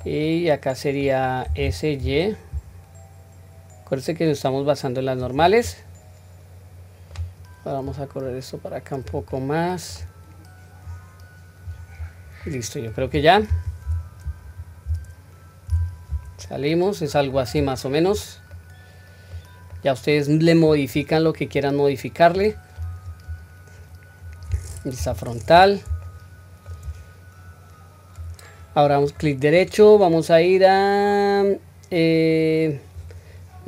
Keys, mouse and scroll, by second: 0.0-1.1 middle drag, 1.5 s, 5.6-7.2 middle drag, 7.9 click, 9.3-9.9 middle drag, 10.9 click, 12.0-12.4 scroll down 1, 12.4-12.9 middle drag, 13.8 q, 15.7 Tab, 16.4-17.3 middle drag, 17.5-18.1 scroll down 2, 18.5-19.3 middle drag, 18.5 scroll down 2, 19.7-20.7 middle drag, 20.9-21.3 scroll down 2, 21.4-22.3 middle drag, 22.8 scroll up 1, 24.1 scroll up 2, 24.2 scroll down 1, 25.0 KP_1, 26.0-26.6 shift+middle drag, 27.4 scroll down 1, 29.0-33.0 right drag.